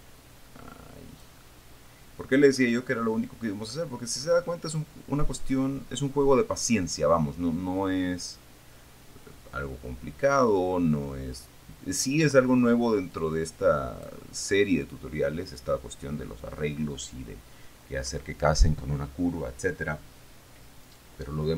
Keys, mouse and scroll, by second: 0.1-1.7 drag, 1.8-3.3 middle drag, 4.0 middle click, 4.7-5.2 scroll up 1, 8.0-12.5 drag, 13.5-14.5 drag, 21.3 right click.